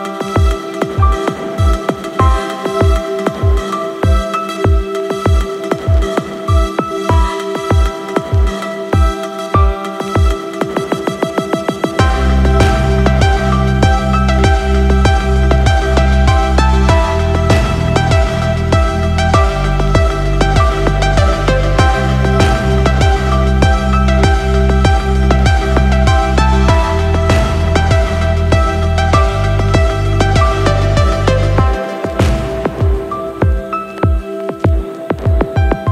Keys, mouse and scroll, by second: 0.8 n, 1.1 n, 1.4 n, 2.4 click, 2.8 n, 3.5-4.0 middle drag, 4.2 scroll up 1, 4.8-5.1 middle drag, 5.9 click, 6.5 click, 7.5 click, 9.2 click, 10.0 click, 11.0 click, 17.2-17.8 scroll down 3, 17.8-18.5 middle drag, 18.8 scroll down 1, 19.2 middle click, 20.7 shift+click, 23.0 ctrl+p, 30.9 click, 32.2 click, 35.3 right click.